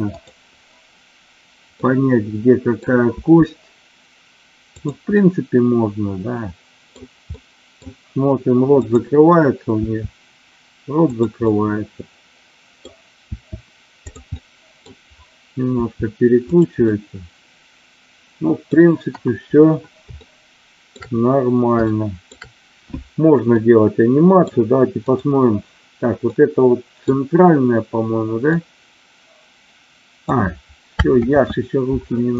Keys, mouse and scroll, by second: 0.1-1.2 drag, 1.7 middle click, 3.0 r, 4.8 drag, 5.0-6.9 middle drag, 7.3-7.8 middle drag, 9.8 r, 11.1 click, 11.4-12.8 middle drag, 13.3 r, 14.4-14.8 middle drag, 15.8 r, 16.5 click, 16.9-18.8 middle drag, 19.0 KP_1, 20.1-21.0 shift+middle drag, 21.9-22.2 shift+middle drag, 23.5-24.5 middle drag, 25.0 click, 26.3-27.0 middle drag, 28.4-30.3 drag, 31.3 ctrl+z.